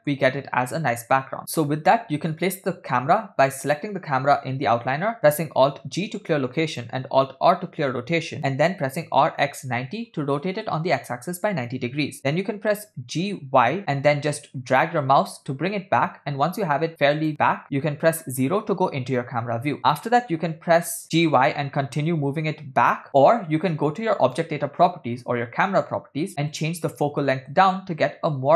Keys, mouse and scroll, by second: 3.7 click, 5.9 alt+g, 7.6 alt+r, 9.1 r, 12.3 g, 18.4 KP_0, 20.5 g, 24.3 click, 26.5-28.5 drag.